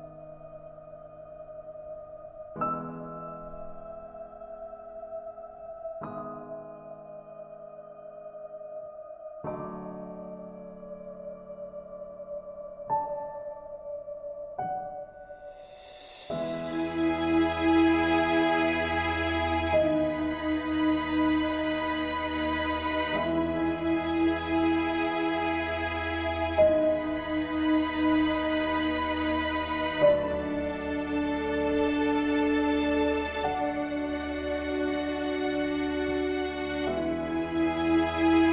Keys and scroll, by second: 27.5 ctrl+space, 33.8 ctrl+Return, 37.2 ctrl+j.